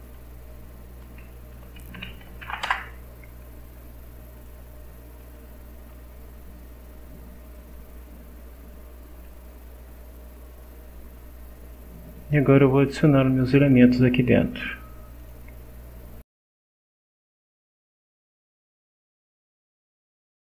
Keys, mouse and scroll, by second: 1.5 Home, 1.9 Delete, 2.4 shift+l, 2.7 shift+Return, 4.3 click, 5.2 click, 13.7 click, 15.2 click, 16.2-17.2 typing, 17.5 click, 18.8 click, 20.0 scroll up 1, 20.4 click.